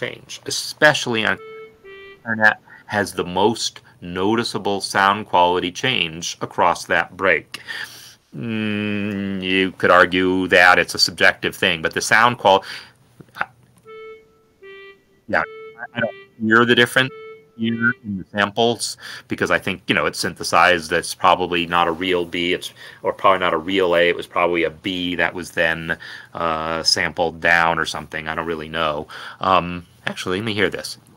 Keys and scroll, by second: 1.7 Left, 2.2 Left, 14.5 Right, 15.1 Left, 30.8 Escape.